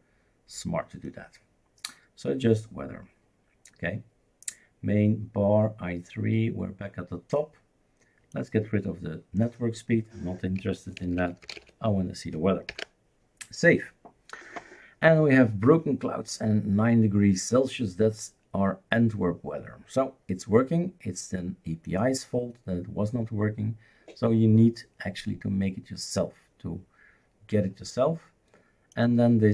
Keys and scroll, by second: 10.3-12.1 typing, 12.7 ctrl+s.